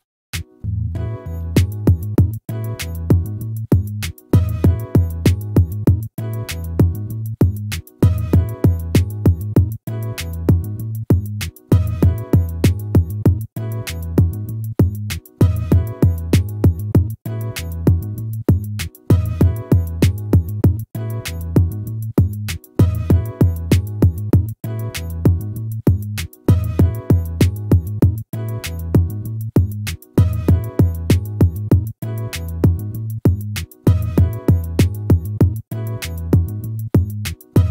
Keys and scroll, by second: 5.6 ctrl+z, 14.8 ctrl+z, 22.6 ctrl+-, 25.8 ctrl+z.